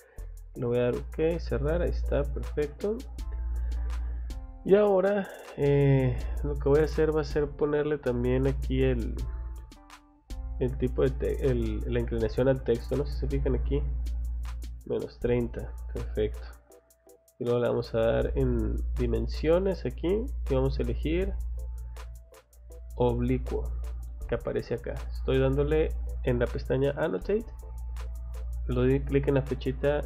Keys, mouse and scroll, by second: 0.9 click, 2.1 middle click, 3.2-4.7 scroll up 1, 5.1 click, 7.5 click, 8.0 click, 8.7 click, 14.2 click, 16.2 middle click, 17.4 click, 25.0 click, 25.4 click.